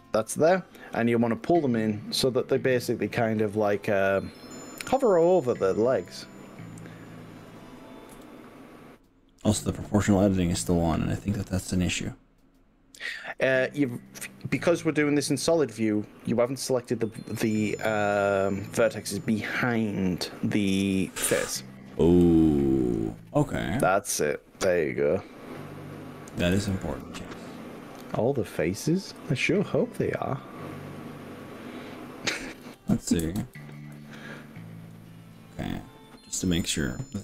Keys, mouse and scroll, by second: 1.4 click, 4.1 click, 5.4 g, 6.1 y, 8.2 x, 13.4 click, 20.6 ctrl+z, 22.2-25.0 middle drag, 25.7-26.0 middle drag, 26.6 click, 27.3 middle click, 29.2-32.4 middle drag, 32.8 ctrl+z, 33.4 ctrl+z, 33.6 ctrl+z, 34.0 ctrl+z, 35.3-36.2 middle drag, 36.3 middle click.